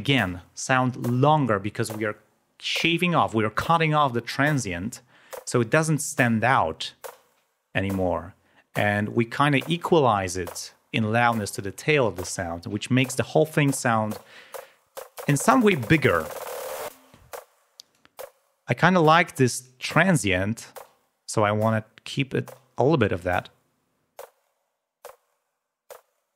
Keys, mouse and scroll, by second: 17.9 click, 21.4-22.9 drag, 25.8 click.